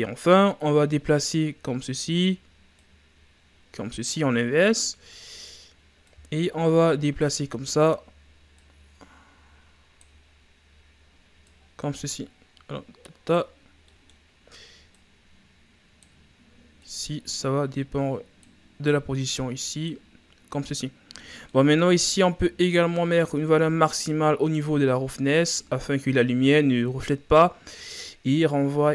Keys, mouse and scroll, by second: 0.7-16.8 drag, 19.5 click, 19.7-20.2 drag, 21.6 click, 21.8-28.9 drag.